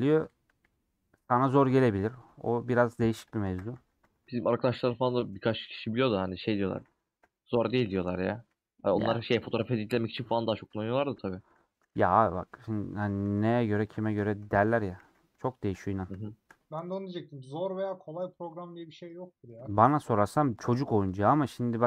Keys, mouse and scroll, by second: 0.4 KP_1, 1.8 3, 3.2 click, 3.4 ctrl+a, 7.3 ;, 7.7 shift+middle click, 8.1 3, 8.8 alt+z, 9.5 click, 10.2 ;, 11.2 shift+middle click, 11.8 alt+z, 12.1-13.3 middle drag, 13.3 3, 15.1 ctrl+x, 15.9 alt+click, 17.1 click, 17.7 middle click, 18.6 click, 19.2 middle click, 19.5 3, 20.2-21.2 middle drag, 21.2 ctrl+click.